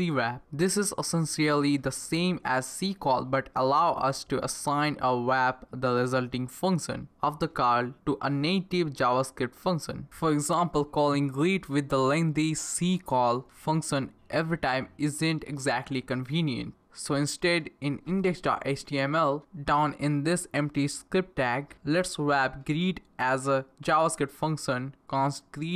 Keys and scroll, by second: 11.6 super+x, 12.4 BackSpace, 14.8 Return, 14.8 super+v, 17.4 Return, 21.7-25.7 typing, 24.8 Return.